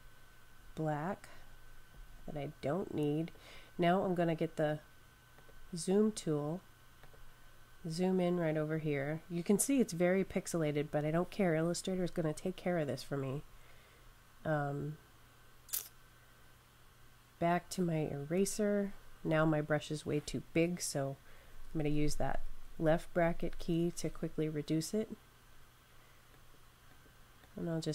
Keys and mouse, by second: 5.2 click, 7.1 click, 18.1 e, 21.2-27.5 typing, 26.2 click.